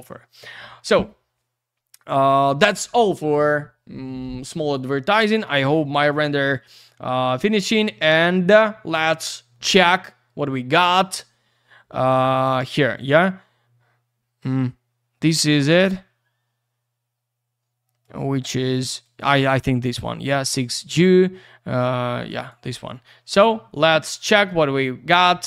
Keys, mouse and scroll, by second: 5.0 click, 8.4 click, 8.4 click, 10.1 click, 10.7 click, 10.8 click, 12.8 click, 13.0 click, 18.0 click, 18.2 click, 19.0 click, 19.2 click, 22.2 click, 22.3 click, 22.4 click, 22.5 click.